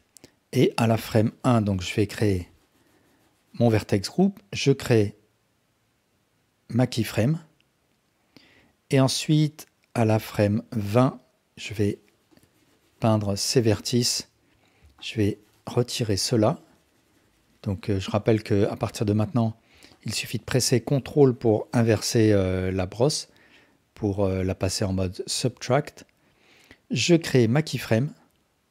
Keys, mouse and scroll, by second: 1.2 click, 1.9-3.7 drag, 5.0 click, 8.6-10.1 drag, 11.7 click, 12.3-14.3 drag, 15.0-18.3 ctrl+drag, 19.9-22.2 ctrl+drag, 27.4 click.